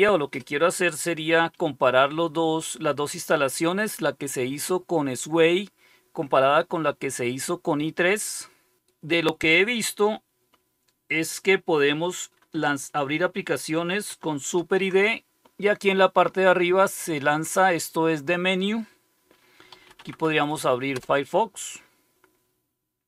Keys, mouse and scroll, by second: 14.5 super+d, 19.4-20.9 typing, 20.9 Return.